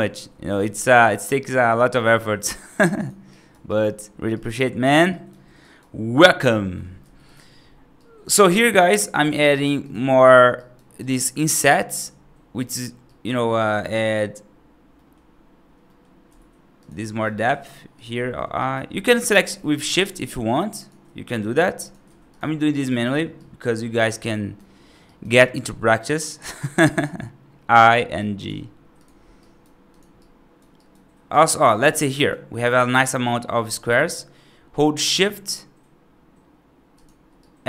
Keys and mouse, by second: 0.4 r, 3.2 right click, 3.5 right click, 4.2 right click, 4.9 right click, 5.5 right click, 6.9 3, 7.9 right click, 8.4 right click, 9.3 right click, 10.1 middle click, 10.4 right click, 10.9 right click, 11.5 right click, 12.5 middle click, 12.9 right click, 13.6 middle click, 14.8 middle click, 15.7 middle click, 16.1 i, 16.9 right click, 17.3 g, 18.1 middle click, 18.4 right click, 22.1 shift+click, 22.6 right click, 22.9 middle click, 23.2 right click, 23.7 middle click, 24.1 right click, 24.9 right click, 25.3 middle click, 26.7 i, 27.9 right click, 28.3 g, 29.3 right click, 30.0 right click, 30.6 right click, 31.2 right click, 31.5 right click, 31.7 middle click, 32.1 right click, 33.5 shift+click, 37.3 right click.